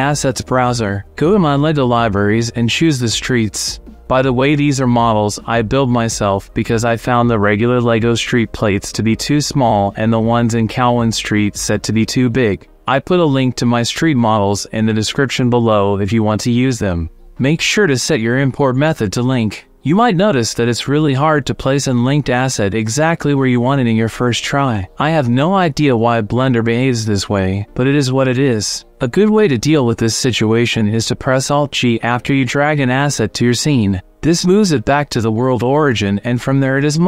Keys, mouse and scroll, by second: 0.2 click, 1.9-3.7 drag, 6.4 click, 7.7 click, 15.0-17.2 drag, 19.8 click, 22.3-25.5 middle drag, 26.7 shift+middle click, 28.2 b, 29.8 n, 33.3 middle click, 34.4 alt+g.